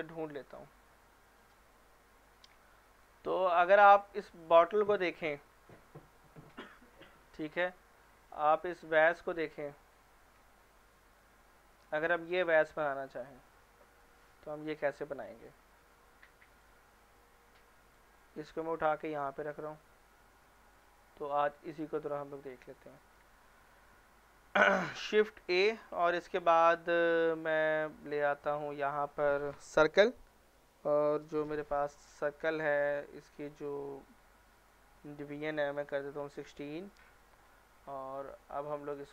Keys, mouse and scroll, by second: 1.4 click, 2.3-3.2 right click, 3.5-4.2 scroll up 1, 4.2 scroll down 1, 8.0-8.5 scroll up 1, 9.3-9.9 middle drag, 12.3 scroll up 1, 14.8 scroll down 1, 15.1-16.6 scroll up 1, 16.6-18.2 drag, 18.3-19.3 right drag, 19.8-21.1 middle drag, 22.5-23.0 scroll down 1, 23.0 middle click, 23.4 shift+middle click, 23.6 scroll up 1, 25.4 shift+a, 29.7 click, 31.5-32.4 right drag, 33.2 click, 37.8-38.5 scroll down 1, 38.5-39.1 right click.